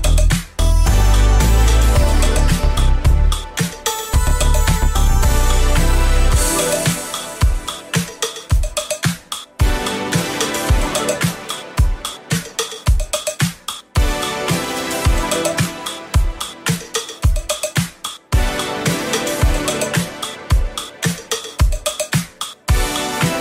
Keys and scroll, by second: 2.3 ctrl+z, 16.3 ctrl+d.